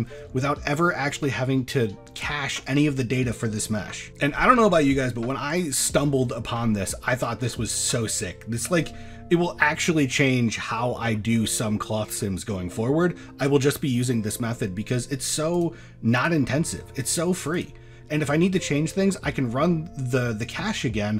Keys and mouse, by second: 4.9 middle drag, 6.0 middle click, 6.7 middle drag, 7.1 shift+middle click, 8.3 shift+middle drag, 15.6 click, 17.5 click.